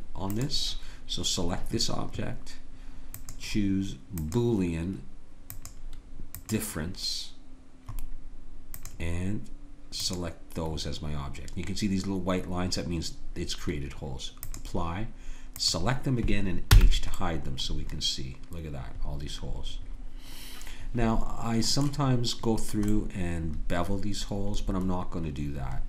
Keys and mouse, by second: 0.4-2.2 drag, 3.2-7.5 drag, 8.8-12.9 drag, 14.5-16.7 drag, 16.7 h, 17.4 click, 17.7-19.3 middle drag, 22.9 middle click.